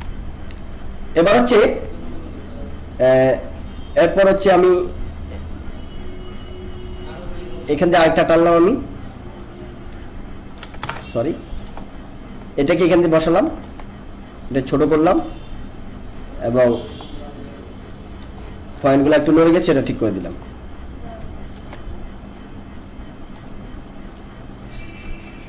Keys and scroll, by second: 10.8 ctrl+z.